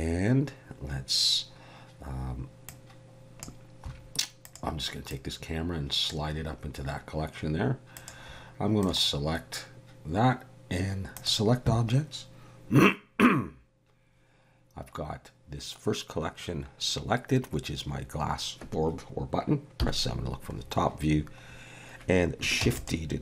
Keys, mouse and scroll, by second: 2.7 click, 4.5 click, 5.1 click, 7.9 click, 8.8 right click, 19.8 KP_7, 20.6-21.3 scroll down 5, 21.5-22.1 scroll up 2, 22.6 shift+d.